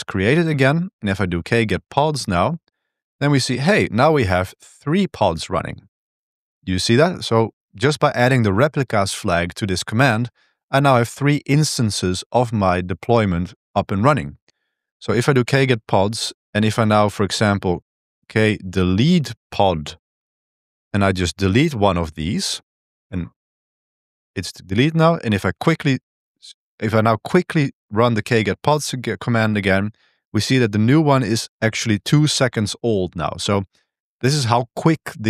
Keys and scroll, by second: 1.0-2.4 typing, 14.9-16.3 typing, 17.7-19.8 typing, 20.1 Tab, 20.6 Tab, 21.1 Tab, 21.7 Return, 23.1 Return, 23.1-25.4 typing.